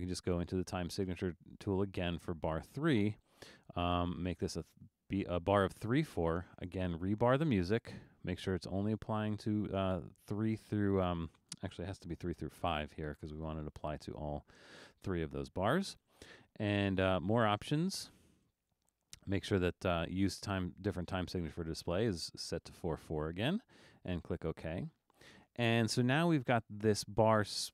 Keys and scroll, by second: 12.3 5.